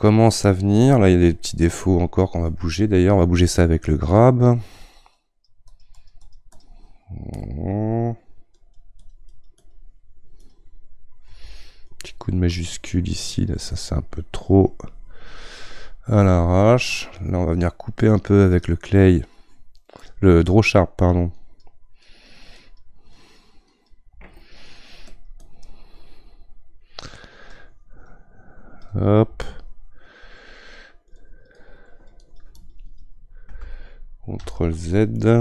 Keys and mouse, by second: 4.2-7.4 drag, 7.4-8.5 middle drag, 8.5-14.9 drag, 16.4-18.6 middle drag, 18.6-34.4 drag, 34.4 ctrl+z, 35.2-35.4 middle drag.